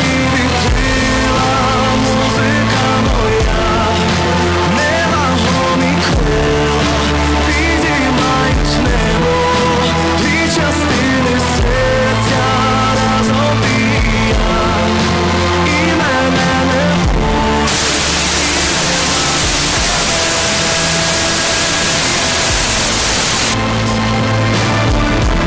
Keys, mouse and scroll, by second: 2.7 b, 5.1 Up, 23.6 Page_Down.